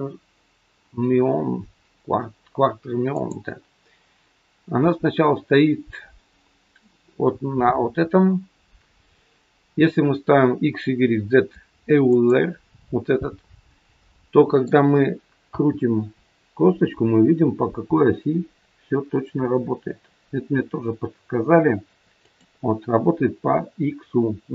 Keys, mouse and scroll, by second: 3.0 click, 14.0 middle click, 15.4 r.